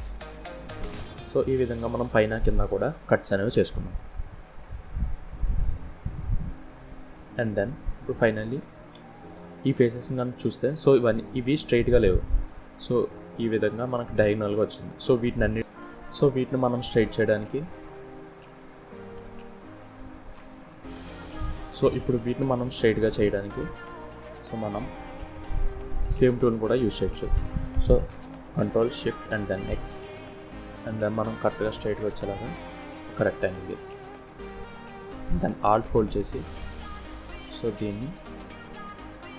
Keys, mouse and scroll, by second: 0.3-0.8 scroll up 1, 0.9 KP_1, 1.8 scroll up 4, 2.8-3.4 scroll down 2, 3.6 click, 4.1-4.7 scroll down 1, 4.7 middle click, 6.7 click, 7.2 middle click, 8.1 KP_7, 8.7-9.3 scroll up 6, 9.3-9.7 scroll down 2, 9.7 click, 10.5 click, 13.3 scroll down 2, 13.7 shift+middle click, 14.4 scroll down 1, 14.6 middle click, 15.6 middle click, 15.6 scroll down 2, 15.6 KP_7, 16.4 middle click, 17.0 Tab, 17.4 middle click, 18.3 KP_7, 18.8-19.3 scroll up 5, 19.4 shift+middle click, 20.4 click, 22.5 click, 25.4 click, 28.5 ctrl+shift+x.